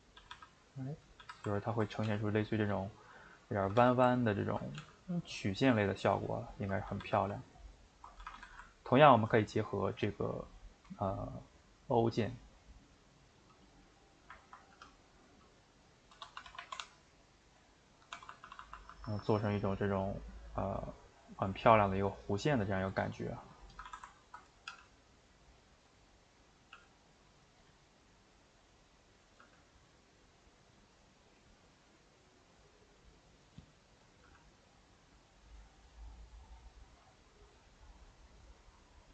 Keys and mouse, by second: 0.2-2.0 typing, 0.5 middle click, 3.6 a, 3.8 a, 4.8 g, 6.9 a, 7.8 ctrl+Right, 8.3 a, 9.0 ctrl+Right, 10.0 click, 12.3-14.0 drag, 14.0 middle click, 14.7 g, 22.8 middle click, 23.7 a, 23.8 a, 24.2 ctrl+Right, 24.7 g, 26.5 click, 26.7 g, 29.3 click, 29.4 g, 34.1 click, 34.2 g, 36.8 click, 36.9 g.